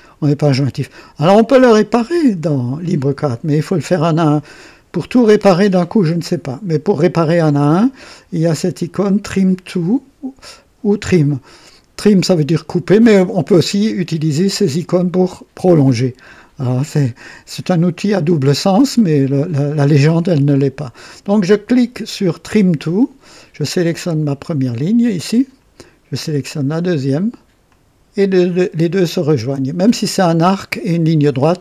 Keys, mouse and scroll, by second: 22.5 click, 25.3 click, 27.6 click.